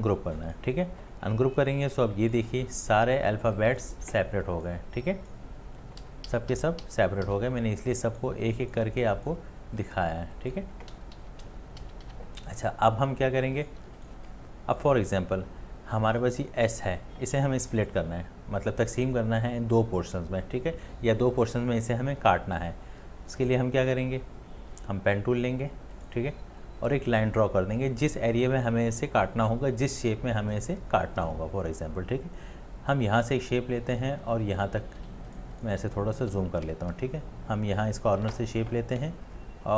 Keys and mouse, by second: 6.0 ctrl+z, 6.3 ctrl+z, 6.5 ctrl+z, 6.8 ctrl+z, 7.3 ctrl+z, 10.9 ctrl+z, 11.5 ctrl+z, 11.8 ctrl+z, 12.1 ctrl+z, 13.8 space, 35.1 space, 35.7 ctrl+space, 36.7 ctrl+z.